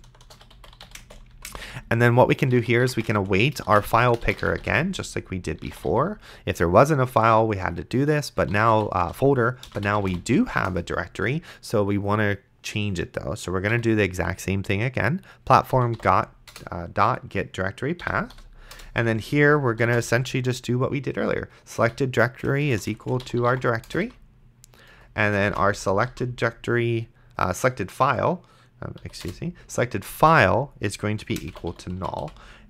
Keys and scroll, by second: 0.0-5.9 typing, 8.3-10.6 typing, 10.7 Return, 13.7 ., 15.5-16.7 typing, 18.0 End, 18.3 ;, 18.7 Return, 20.2 shift+-, 21.8 Return, 22.5-24.1 typing, 24.9 Return, 25.5-26.6 typing, 29.0 Down, 29.3 Return, 30.2-32.6 typing.